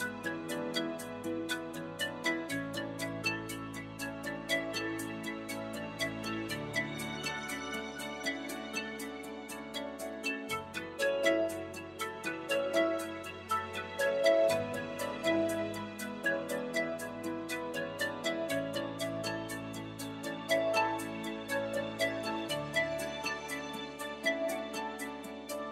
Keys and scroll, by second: 7.2 i, 11.2 3.